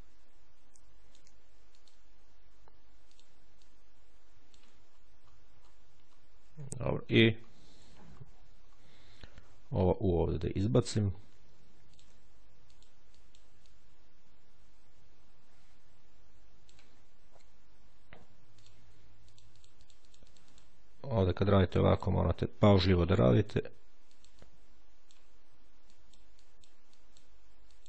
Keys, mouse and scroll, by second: 1.6 click, 3.0 ctrl+click, 4.7-6.4 ctrl+scroll down 2, 6.6-7.2 ctrl+shift+scroll down 3, 8.0-9.4 ctrl+shift+scroll up 3, 11.8 ctrl+click, 12.6 click, 13.5 click, 18.2 ctrl+click, 19.2-20.9 drag, 21.0 click, 21.8 click, 23.2 ctrl+click, 24.0 click, 25.8-27.0 drag, 27.6-27.8 drag.